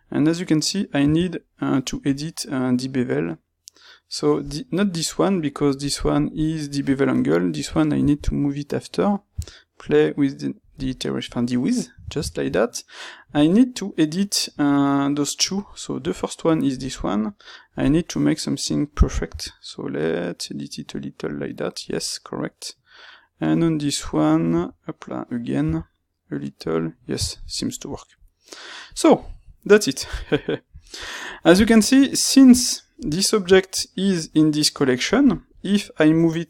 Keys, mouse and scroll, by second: 28.8 click.